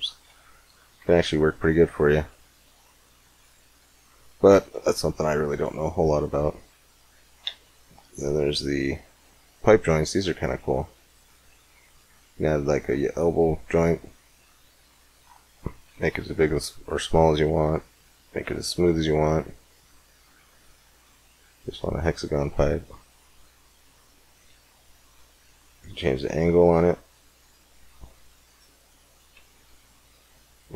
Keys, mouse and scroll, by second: 2.4-4.6 middle drag, 4.6 x, 5.4 shift+a, 7.2 shift+a, 11.6 click, 12.4-13.4 middle drag, 14.8-16.7 drag, 17.5-19.4 drag, 20.4-22.3 middle drag, 23.4-25.2 drag, 25.4-27.1 drag, 28.4-30.7 drag.